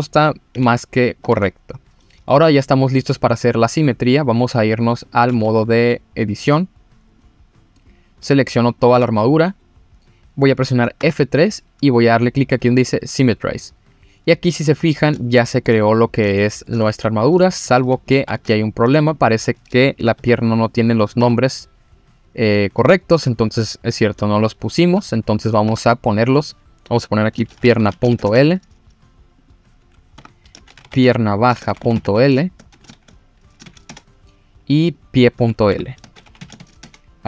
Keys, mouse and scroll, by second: 0.5 g, 1.1 click, 1.3 ctrl+z, 1.7-2.0 scroll up 2, 2.0 click, 2.0 middle click, 3.8 click, 5.0 click, 5.3 Tab, 6.2-7.2 drag, 7.8 click, 8.3-8.7 scroll down 1, 8.7 click, 8.9 a, 9.8-10.8 scroll up 1, 11.0 F3, 14.8-15.1 scroll up 1, 15.2 shift+middle click, 15.9-16.2 scroll down 1, 16.3 shift+middle click, 17.0 scroll down 1, 17.4 shift+middle click, 18.1 ctrl+z, 18.5-19.1 scroll up 2, 19.1 click, 19.4-20.0 scroll up 2, 20.0 F3, 21.0 click, 21.2 F2, 22.7 scroll down 1, 22.9 shift+middle click, 23.7-24.0 scroll up 3, 25.3 click, 25.6 F2, 29.4 click, 30.1 F2, 31.8 a, 34.9 click, 35.7 F2.